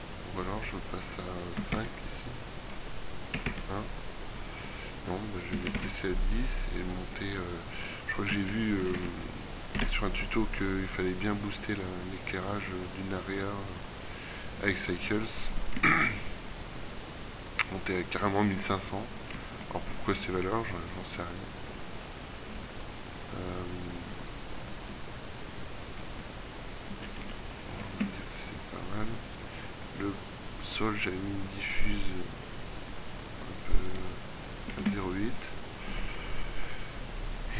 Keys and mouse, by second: 9.0 KP_0, 23.8 middle click, 27.2 z, 27.4 z, 28.0 ctrl+w, 29.2 click, 33.2 Escape, 34.8 ctrl+w.